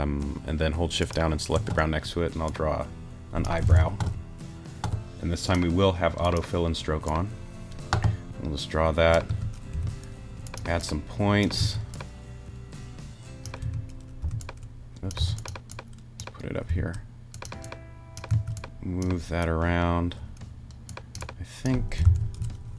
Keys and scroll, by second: 3.7 super+z, 9.3 a, 9.7 t, 11.6 a, 13.6 t, 16.7 t, 18.3 a, 22.0 super+z.